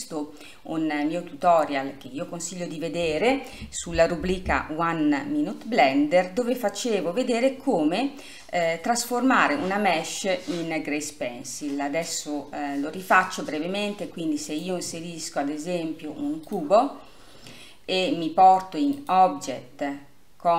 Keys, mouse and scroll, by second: 0.2-16.7 middle drag, 16.7-17.4 drag, 17.4-19.1 scroll down 2, 19.1-19.8 scroll down 1, 19.8 scroll down 1.